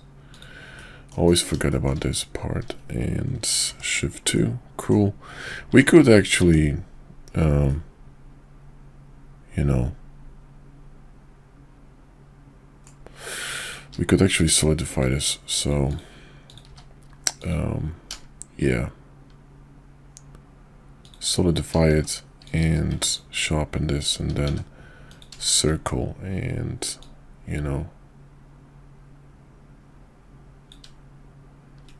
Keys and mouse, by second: 0.7 middle click, 1.2 KP_5, 1.7 shift+middle click, 3.6 shift+2, 4.3 middle click, 5.7 Tab, 7.6-12.8 middle drag, 13.8 q, 16.7 q, 21.9 shift+2, 22.4 click, 22.6 q, 24.5 d, 25.4 shift+middle drag, 27.0-31.9 drag.